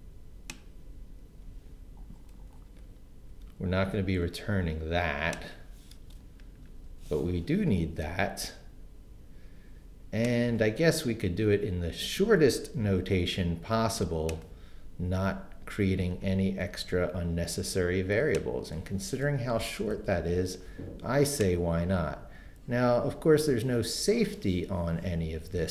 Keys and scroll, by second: 3.3 super+x, 6.0 Return, 6.6 super+v, 12.9 super+x, 16.9 super+v, 19.6 BackSpace.